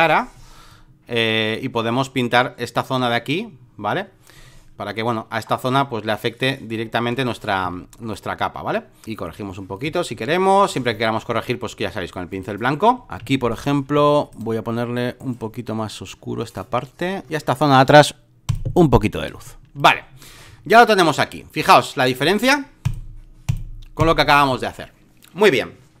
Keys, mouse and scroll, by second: 7.6 x, 8.1-11.8 drag, 12.3 click, 13.1 b, 13.2 alt+middle click, 13.8 x, 14.3 right click, 15.1-17.3 drag, 18.4 click, 19.3 space, 19.4 click, 22.1-26.0 drag.